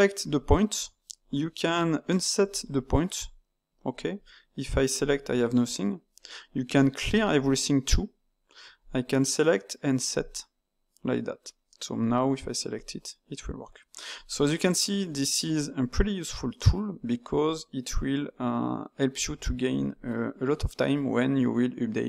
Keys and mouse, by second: 0.2-4.2 drag, 4.9-8.8 drag, 10.1-12.0 drag, 12.7-14.6 drag, 14.6-17.5 middle drag.